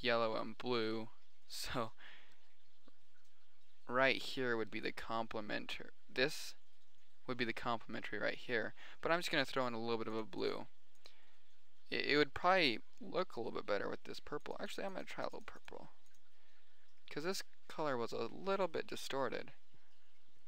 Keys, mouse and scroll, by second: 1.6-2.1 middle drag, 2.2-3.2 middle drag, 3.4-4.1 middle drag, 16.0 middle click, 17.2-18.7 middle drag, 19.0 middle click, 19.6-20.4 middle drag.